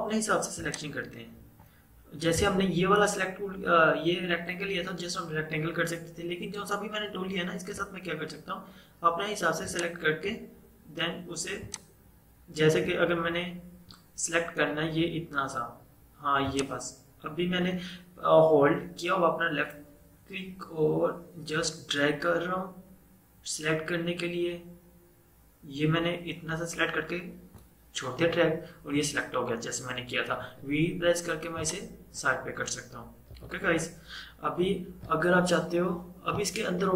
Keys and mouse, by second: 0.7-4.2 drag, 8.0 typing, 9.8-15.3 drag, 16.6-26.5 drag, 30.5 v, 31.6-33.4 drag, 33.4 ctrl+z.